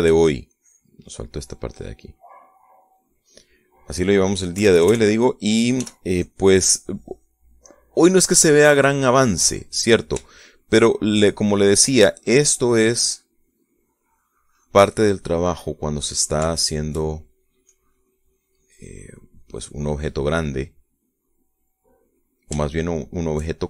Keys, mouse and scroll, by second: 1.6 shift+click, 3.5-5.7 drag, 5.7 KP_Add, 6.9 f, 7.3 click, 7.7 click, 9.2-10.8 drag, 11.3 shift+middle click, 12.3-14.5 shift+drag, 14.6-15.9 drag, 16.1-18.7 middle drag, 18.8-20.3 shift+drag, 20.5-21.5 drag, 21.7 middle click, 23.1-23.6 middle drag.